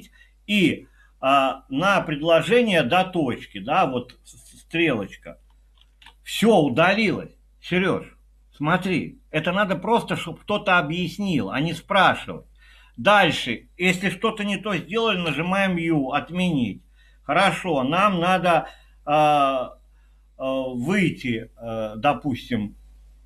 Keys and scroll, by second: 5.9 shift+9, 15.0-15.8 typing.